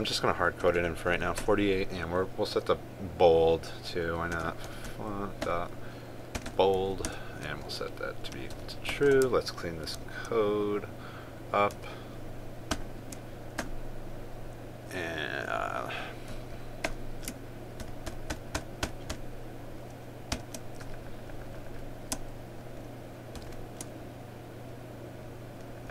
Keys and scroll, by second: 10.7 ctrl+s, 12.5 ctrl+a, 18.5 ctrl+j, 21.0 ctrl+z, 24.1 ctrl+j.